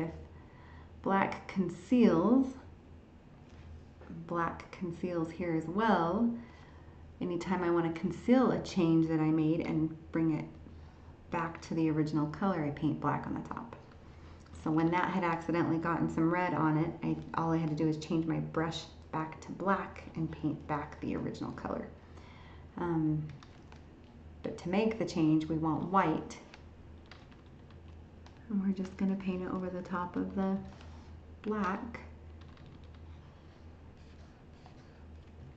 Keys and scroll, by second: 14.6 ctrl+z.